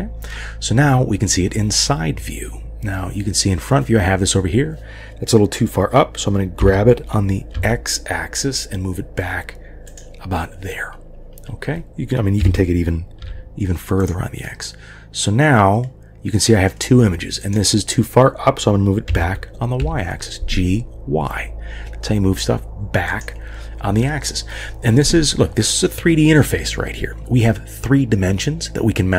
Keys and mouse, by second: 6.6 g, 12.4 g, 14.4-16.7 middle drag, 17.5 click, 19.1 g, 24.0-25.1 middle drag.